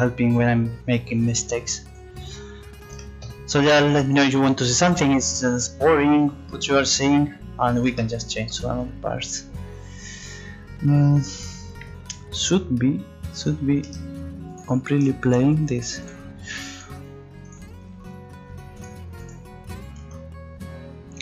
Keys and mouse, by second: 1.9-4.3 drag, 9.2 middle click, 9.7 middle click, 15.0-17.5 drag, 19.4 click.